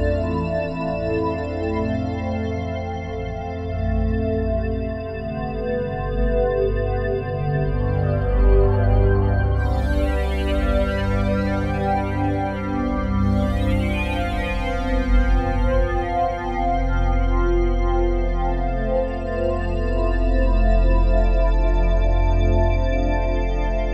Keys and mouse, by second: 2.4-3.8 drag, 5.5-8.4 drag, 8.2 ctrl+c, 9.2-11.5 drag, 11.5 click, 12.0-13.2 ctrl+drag, 13.4 click, 14.3 ctrl+alt+click, 15.0 ctrl+alt+shift+click, 15.4 alt+shift+click, 16.4 ctrl+alt+click, 17.2 click, 17.8 click, 18.7 ctrl+v, 20.4 Return, 22.1-22.8 drag.